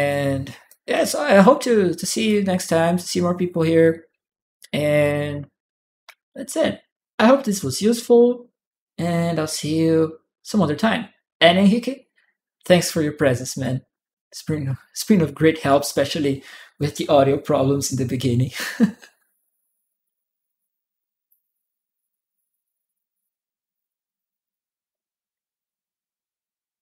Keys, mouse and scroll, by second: 0.7-2.1 drag, 2.8 right click, 2.8-3.9 drag, 4.8 click.